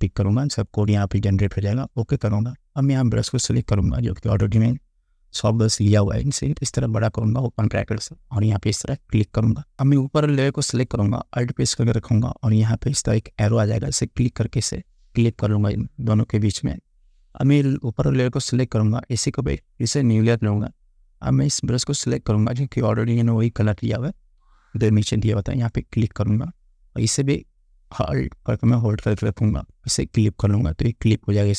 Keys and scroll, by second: 24.5 [.